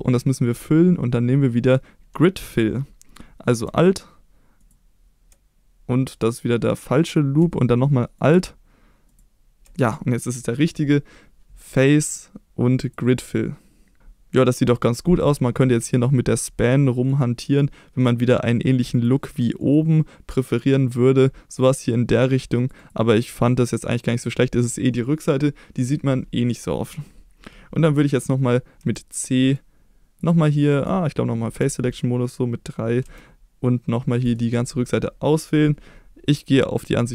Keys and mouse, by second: 4.6 alt+click, 8.2 alt+click, 11.8-13.0 drag, 17.5 click, 19.0-22.9 drag, 23.2 click, 23.7 click, 28.8 c, 30.7 right click, 31.6 3, 33.1 c, 34.4 right click.